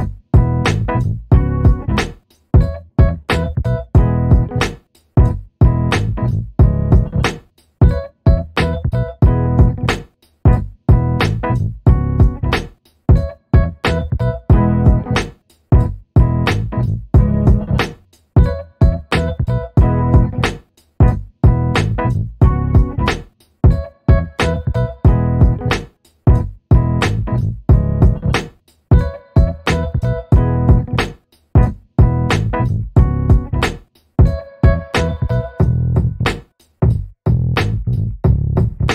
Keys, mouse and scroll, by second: 0.3-0.7 scroll up 1, 0.7 click, 4.0 BackSpace, 5.2-5.7 scroll up 1, 5.7 alt+middle click, 6.5-6.8 scroll down 1, 6.8 click, 8.4 BackSpace, 9.3-11.3 scroll down 1, 11.3 click, 13.4-14.0 scroll up 1, 14.5 alt+middle click, 14.8 scroll down 1, 15.1 alt+middle click, 15.6-16.1 scroll up 1, 16.1 ctrl+click, 18.4 alt+middle click, 19.3 ctrl+click, 20.9 middle click, 21.5 alt+click, 22.4 alt+click, 22.5 alt+middle click, 23.1 alt+click, 24.2 middle click, 24.9 scroll down 1, 25.6 click, 25.9 scroll up 1, 26.5 click, 31.2 0, 31.4 Return, 32.3 click, 32.6 scroll down 1, 32.9 middle click, 33.9-34.2 scroll down 1, 34.2 alt+click, 34.6 alt+middle click, 34.9 alt+click, 35.9-36.8 scroll up 1, 37.0 click, 37.8 BackSpace, 38.2-38.9 scroll up 1.